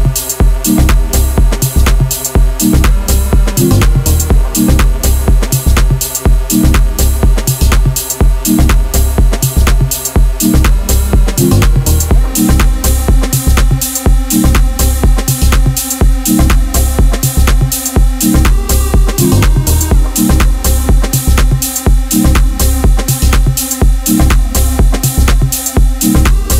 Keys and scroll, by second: 0.9 ctrl+b, 2.9 a, 3.9 ctrl+b, 7.0 a, 10.2 Tab, 10.8 s, 11.8 r, 16.6 KP_Decimal, 16.8 KP_1, 19.3 s, 20.5 s, 22.3 KP_7, 22.5 z, 22.6 1, 23.0 1, 23.7 Tab, 24.1 1, 24.3 a, 24.4 a, 26.4 z.